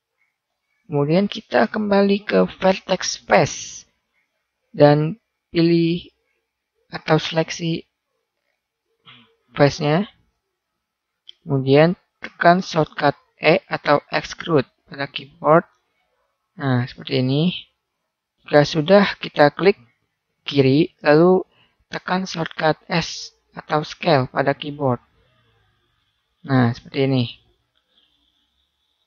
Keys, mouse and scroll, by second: 0.1-1.3 right drag, 3.3-6.0 right drag, 4.7-5.9 drag, 6.8-8.0 middle drag, 8.2 middle click, 8.4 middle click, 10.6 middle click, 14.5 e, 18.0-19.3 middle drag, 24.2 s.